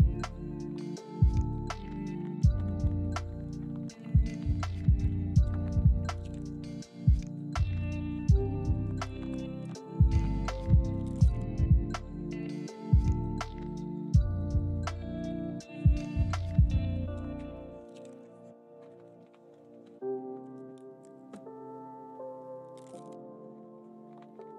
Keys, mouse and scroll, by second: 1.3 6, 1.4 Return, 1.9 s, 2.6-3.0 scroll up 1, 3.0-5.8 typing, 3.9 ctrl+click, 4.8 ctrl+click, 5.6 ctrl+click, 6.2 ctrl+click, 7.1 s, 10.3-12.3 typing, 10.6 ctrl+click, 11.2 ctrl+click, 12.2 ctrl+click, 12.8 ctrl+click, 13.1 middle click, 14.2 1, 14.4 scroll up 1, 14.6 shift+middle click, 15.2 s, 15.7 ctrl+click, 16.1 s, 16.7 middle click, 17.8 1, 18.2 shift+d, 20.0 ctrl+click, 20.8 g, 22.3 ctrl+click, 22.5 scroll down 1, 22.6 middle click.